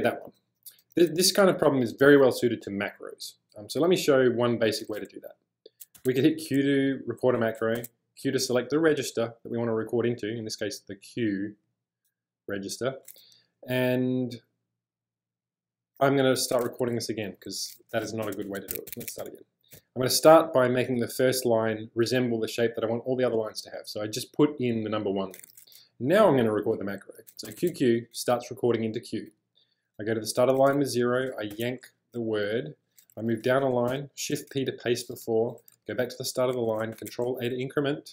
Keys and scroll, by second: 0.0-1.9 typing, 6.0 q, 7.8 q, 16.8-19.8 typing, 27.5 q, 27.6 q, 30.2-32.0 typing, 33.2-34.4 typing, 35.8 0, 37.1 ctrl+a.